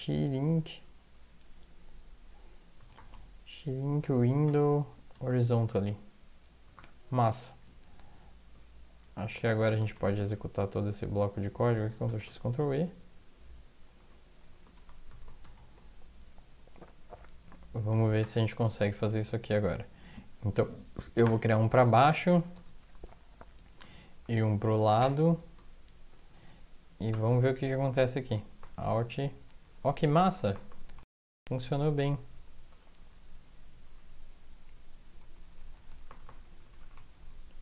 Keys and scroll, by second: 0.0-0.1 typing, 2.8 typing, 4.6-5.1 typing, 6.6 typing, 9.0 Up, 9.0 typing, 9.2 Up, 9.4 Up, 9.5 Up, 9.9 shift+Down, 10.1 shift+Down, 10.2 shift+Down, 10.7 shift+Down, 11.7 ctrl+x, 12.1 ctrl+e, 13.4 Down, 14.0 Up, 15.1 ctrl+x, 15.4 ctrl+e, 18.2 ctrl+\, 21.2 -, 22.6 ctrl+Tab, 22.6 -, 25.0 |, 27.1 ctrl+\, 28.6 alt+Right, 28.9 alt+Right, 28.9 typing, 29.3 alt+Left, 29.6 alt+Left, 29.8 alt+Left, 30.0 alt+Left, 30.2 alt+Right, 30.3 alt+Right, 30.5 alt+Right, 30.7 alt+Right, 31.0 alt+Up, 31.2 alt+Up, 31.4 alt+Up, 31.6 alt+Down, 31.9 alt+Down, 32.3 alt+Down, 32.7 alt+Up, 33.0 alt+Up, 34.0 alt+Down, 35.2 alt+Left, 35.4 alt+Left, 35.6 alt+Left, 35.8 alt+Left, 35.9 alt+Left, 36.1 alt+Right, 36.3 alt+Right, 36.6 alt+Right, 36.7 alt+Right, 36.9 alt+Right, 37.0 alt+Left, 37.1-37.6 alt+Left.